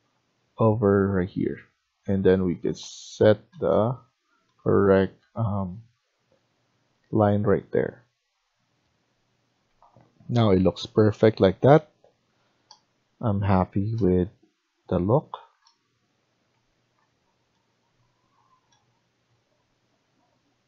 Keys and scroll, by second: 1.7 Escape.